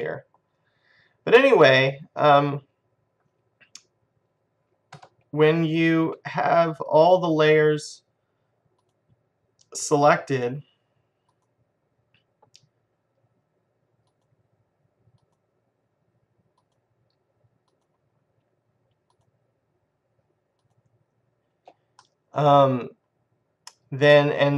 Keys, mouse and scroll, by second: 5.1 Tab, 6.9-11.8 drag, 11.9-13.6 drag, 14.3-22.6 drag, 22.6-23.6 middle drag.